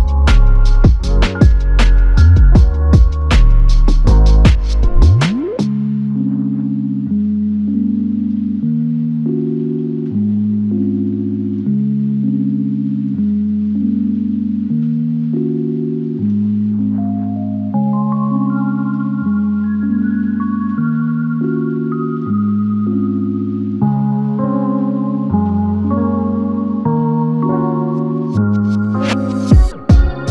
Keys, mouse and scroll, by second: 3.3 double click, 4.1 alt+click, 5.8 double click, 10.0 alt+click, 11.4 double click, 15.8 click, 18.9 alt+click, 20.7 alt+click, 22.5 f, 24.3 double click, 29.9 double click.